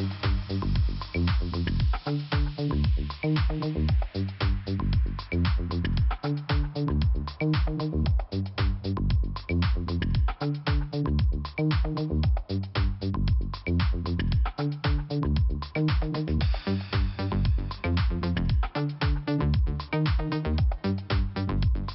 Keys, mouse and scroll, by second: 0.6 click, 0.7 click, 2.2 click, 3.4 click, 5.5 click, 5.6 click, 6.0 click, 6.0 double click, 6.6 double click, 6.7 double click, 8.1 click, 8.2 click, 9.9 click, 10.1 click, 11.4 click, 13.8 click, 13.9 click, 15.2 click, 15.3 click, 15.9 scroll up 2, 16.2 right click, 16.3 right click, 16.9 click, 17.0 click, 19.5 click, 19.6 click, 20.9 click, 21.1 click, 21.7 click, 21.7 click.